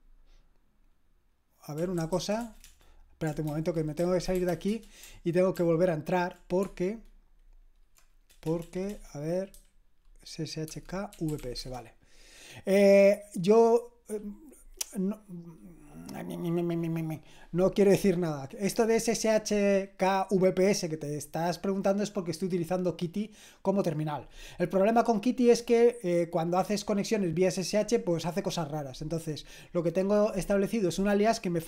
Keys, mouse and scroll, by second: 1.5-2.6 typing, 3.5 ctrl+c, 3.7-5.0 typing, 5.5 ctrl+p, 8.5-11.9 typing.